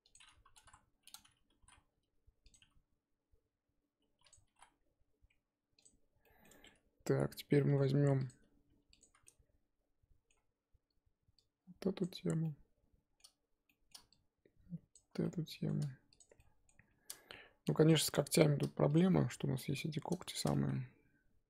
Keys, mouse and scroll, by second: 0.6 KP_1, 1.5 r, 2.5 g, 4.4 r, 5.8 Tab, 6.2 middle click, 6.5 Tab, 7.6 middle click, 7.9 3, 8.3 click, 9.2-10.6 middle drag, 10.6-11.4 scroll up 2, 12.0 shift+click, 12.4-14.9 middle drag, 14.9 shift+click, 15.2 middle click, 16.2 shift+click, 16.4 middle click, 16.8 scroll up 2, 17.9 shift+click, 18.9 shift+click, 19.1-21.4 middle drag.